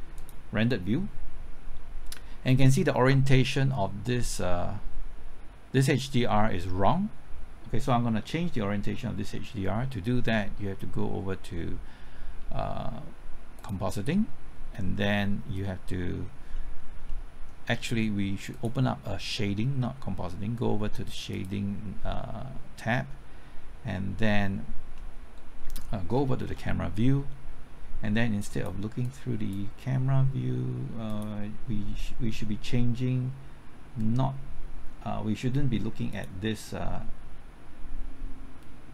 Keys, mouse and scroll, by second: 0.2 click, 16.5 scroll down 1, 17.1-18.6 middle drag, 18.6 click, 24.9 middle click, 26.4 KP_0, 29.5-30.8 drag, 31.1 click.